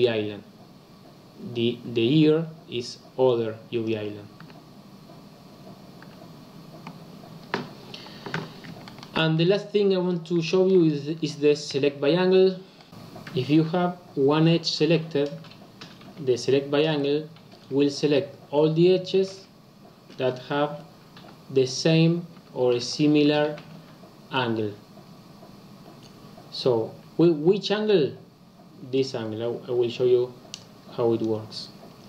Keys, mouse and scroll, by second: 3.8 click, 4.3 l, 6.0 l, 7.2-8.3 scroll down 6, 8.3 Tab, 8.4-8.8 scroll down 3, 8.8-9.5 shift+middle drag, 9.5 scroll down 1, 9.5-10.1 scroll up 3, 10.1 click, 10.4-10.8 shift+middle drag, 10.8-11.6 scroll down 2, 11.6 KP_Decimal, 12.3-12.7 scroll down 4, 12.7 middle click, 12.8 Tab, 30.6 click.